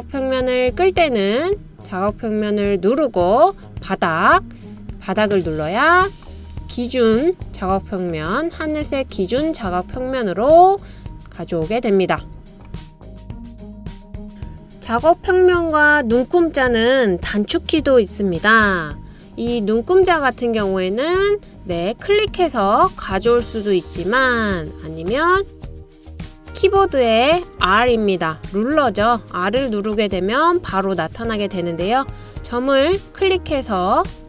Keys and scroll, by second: 27.4 r, 27.7 r.